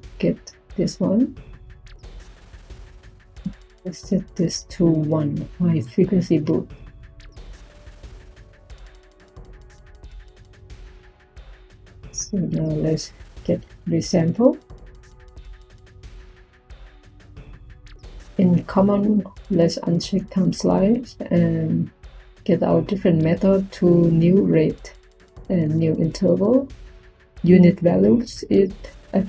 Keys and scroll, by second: 12.5 Tab, 13.0-13.9 typing.